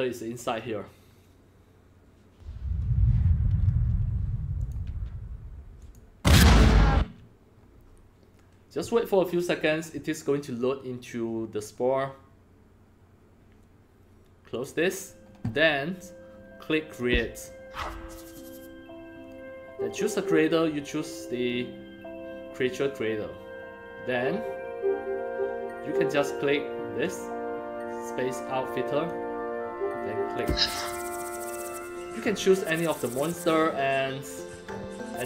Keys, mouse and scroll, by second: 3.6 Escape, 4.5 click, 4.8 Escape, 5.8 click, 6.9 Escape, 14.5 click, 16.9 click, 27.0-29.0 drag, 30.2 click, 32.2-33.0 scroll down 1, 34.6-35.0 scroll down 1.